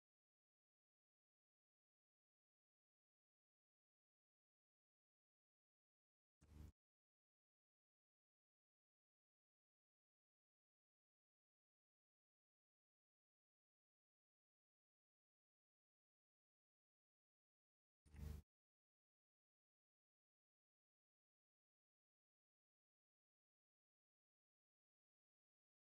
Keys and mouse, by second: 0.0 middle click, 1.5-3.6 middle drag, 6.2 alt+middle click, 8.5 g, 10.6 click, 11.2 r, 13.2 click, 13.7-15.5 middle drag, 15.7 alt+click, 15.7 alt+right click, 18.1 g, 19.9 click, 20.4 r, 21.0-22.1 drag, 21.3 right click, 22.3 shift+click, 22.3 shift+right click, 23.3-25.3 drag, 23.3-25.3 right drag, 25.3-25.9 middle drag.